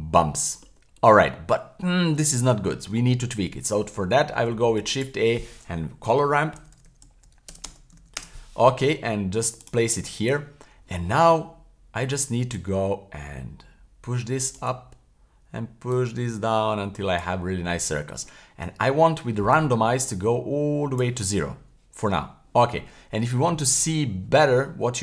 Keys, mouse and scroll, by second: 0.2 middle click, 0.9-1.2 scroll up 1, 1.2-3.2 scroll down 1, 4.4 shift+a, 9.6 click, 12.5-14.6 drag, 15.9-17.2 drag, 19.5-21.0 drag.